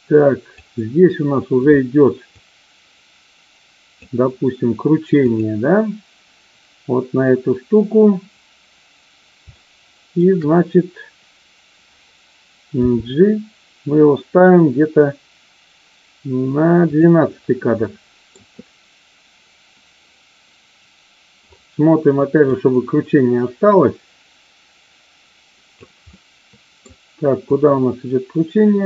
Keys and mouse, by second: 2.3-4.1 drag, 5.2 click, 9.4 shift+middle click, 12.7 g, 16.8 click, 17.8-18.3 middle drag, 22.4-25.8 drag, 26.2-26.8 middle drag, 27.4-28.8 drag.